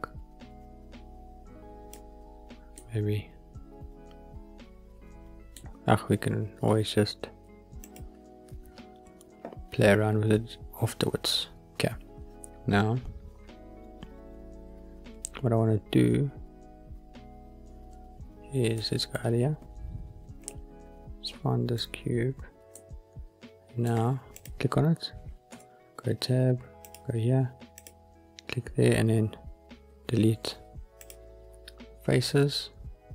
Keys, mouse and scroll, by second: 2.7-3.7 middle drag, 3.7 click, 4.5-5.5 middle drag, 7.8 click, 18.7-19.1 middle drag, 19.2-20.4 scroll down 3, 20.4-21.7 middle drag, 22.6-23.8 middle drag, 24.3 click, 25.4 Tab, 26.8 click, 27.7 click, 29.7 Delete.